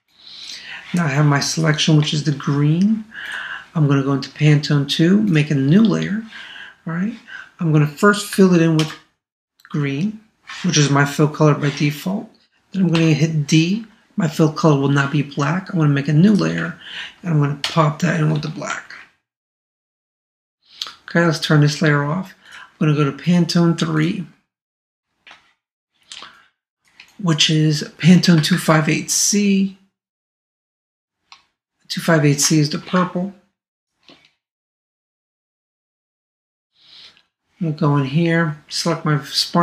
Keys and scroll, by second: 8.8 alt+BackSpace, 17.6 alt+BackSpace, 18.7 super+d, 28.5 super+Tab, 30.9 super+Tab, 33.0 super+Tab.